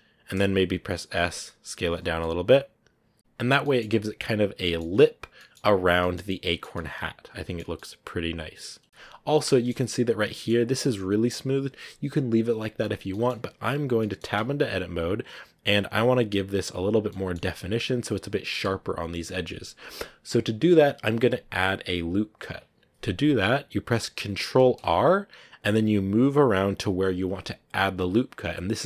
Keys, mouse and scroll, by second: 1.1 s, 1.9 Tab, 2.1-5.8 middle drag, 5.8 scroll down 1, 5.9-7.5 middle drag, 7.5 scroll down 1, 7.6-9.6 middle drag, 9.6-10.1 scroll up 4, 10.2 shift+middle click, 10.6 scroll up 1, 13.0-14.2 middle drag, 14.2 Tab, 17.0 middle click, 17.6-18.9 scroll up 1, 18.9 scroll down 1, 19.4-24.5 middle drag, 24.5 ctrl+r.